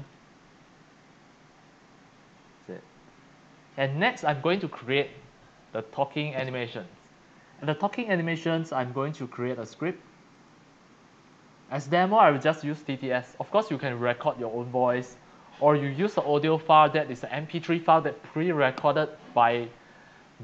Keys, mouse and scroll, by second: 0.1-2.2 drag, 4.1 click, 10.3 click, 12.7-15.6 drag.